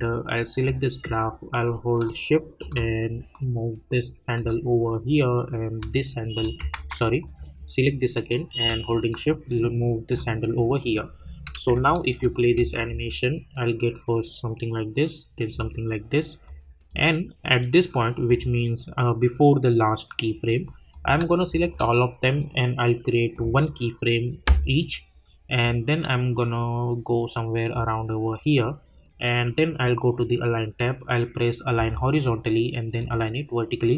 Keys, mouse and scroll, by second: 8.7 shift+Num_Lock, 12.1 click, 12.6 space, 15.5 space, 16.4 click, 20.9 click, 21.6 shift+click, 25.6 click, 31.7 click.